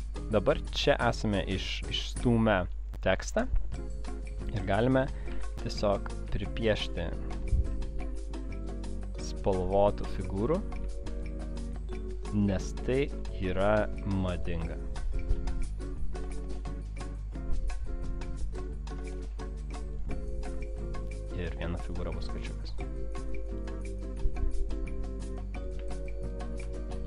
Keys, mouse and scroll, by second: 0.8 click, 6.4 click, 8.0 v, 8.8 click, 10.3 m, 11.0 shift+click, 11.2 shift+click, 11.8 shift+click, 11.8 typing, 11.9 shift+click, 13.7 v, 20.9 shift+click, 21.5 shift+click, 22.2 shift+click, 23.6 click, 24.8 shift+click, 25.4 shift+click, 25.7 shift+click, 25.8 space, 26.1 shift+click, 26.4 shift+click, 26.8 alt+scroll down 1.